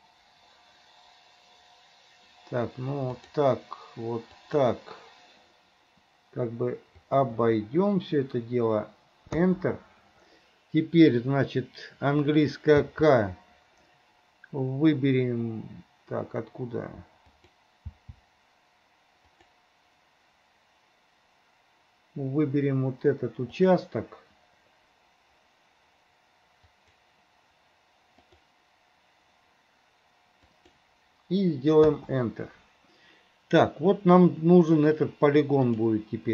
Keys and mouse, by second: 12.9 k, 35.8 middle click.